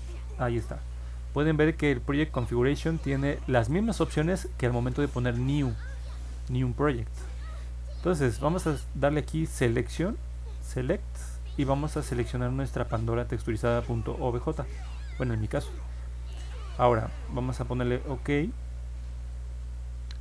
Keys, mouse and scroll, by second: 0.7-1.8 drag, 4.8 click, 10.4 click, 12.5 click, 14.5 click, 18.5 click.